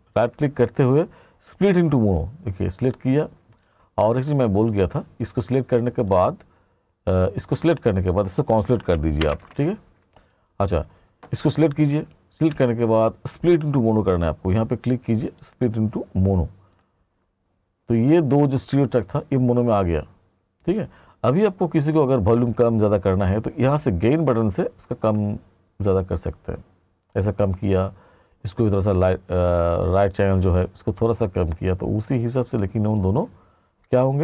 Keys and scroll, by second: 9.3 Page_Down.